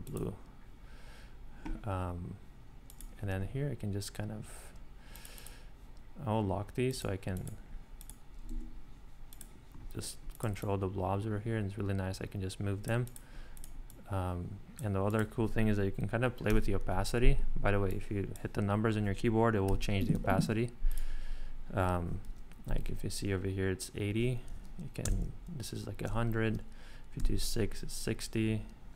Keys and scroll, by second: 16.5 8, 19.7 6, 20.1 8, 25.0 0, 27.2 3.